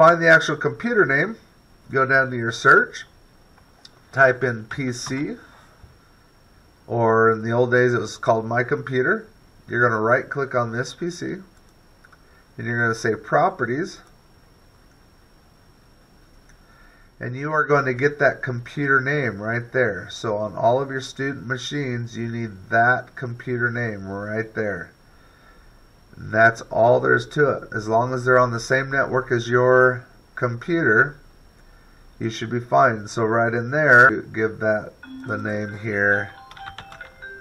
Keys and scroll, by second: 4.9 p, 5.4 c.